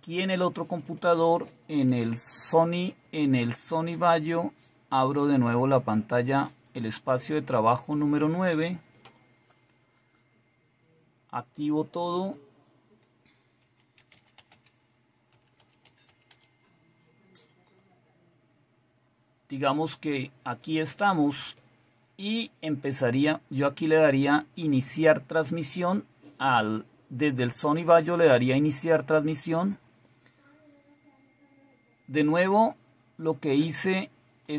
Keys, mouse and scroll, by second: 6.5 click, 33.3 click, 34.4 click.